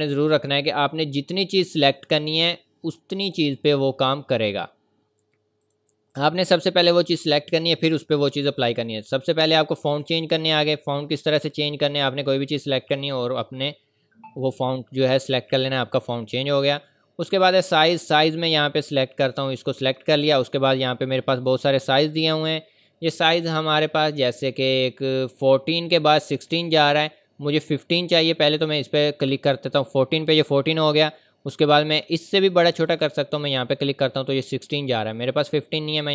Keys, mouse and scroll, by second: 0.2 click, 3.8 scroll down 1, 4.6-5.6 scroll up 1, 5.6 click, 9.0 click, 11.7 scroll down 1, 16.0 click, 29.5 click, 32.9 click, 35.4 click.